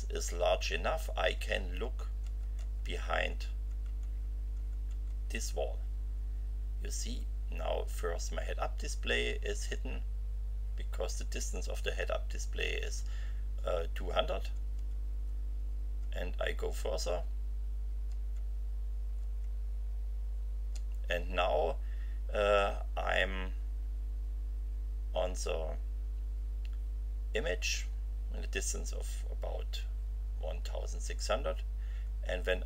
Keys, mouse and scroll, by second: 0.2 F5, 3.7 F5, 6.1 F5, 7.1 F5, 9.5 F5, 13.1 F5, 14.1 F5, 32.0 F5.